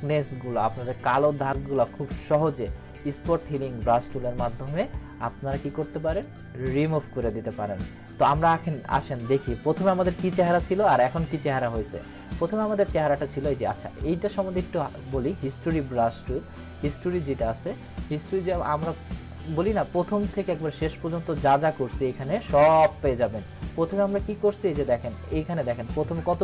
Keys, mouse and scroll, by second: 3.4 click, 3.4-4.3 drag, 12.4 click, 18.9-20.2 scroll up 1, 25.0 click.